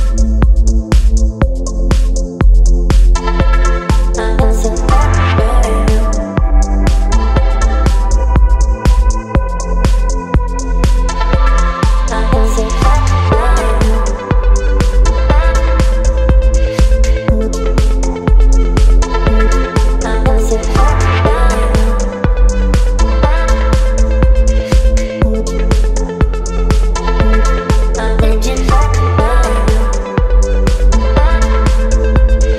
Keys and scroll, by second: 5.1 Return, 13.5 ctrl+c, 15.5 t, 16.6 ctrl+v, 17.8 ctrl+a, 28.1 space, 28.8 v, 29.2 Up, 30.6 Up, 32.2 ctrl+t.